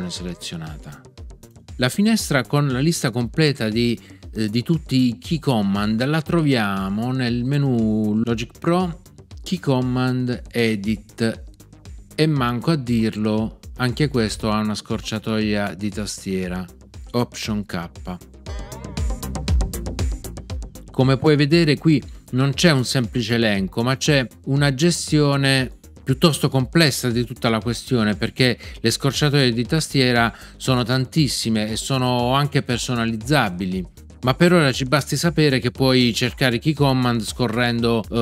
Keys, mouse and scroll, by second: 18.4 alt+k.